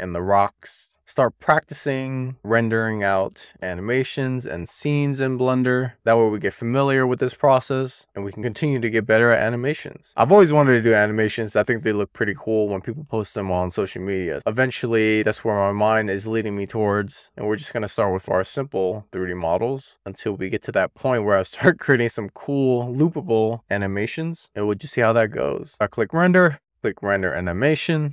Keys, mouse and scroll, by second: 0.4 shift+middle click, 4.9-6.2 shift+middle drag, 6.6-8.0 scroll up 1, 8.1 shift+middle click, 16.1 click, 16.9 e, 18.3 click, 20.3 click, 20.9 click, 22.1 click, 25.7 KP_0, 26.5 click.